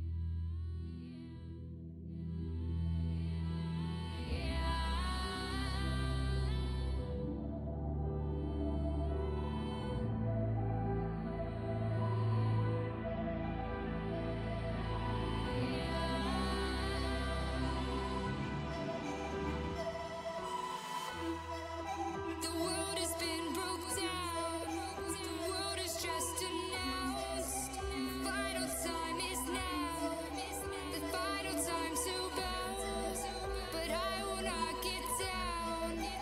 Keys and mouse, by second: 5.8 click, 6.5-7.8 middle drag, 9.6 f, 12.3 ctrl+z, 13.6 f, 20.2-24.9 drag, 25.1 middle click, 25.9-29.7 drag.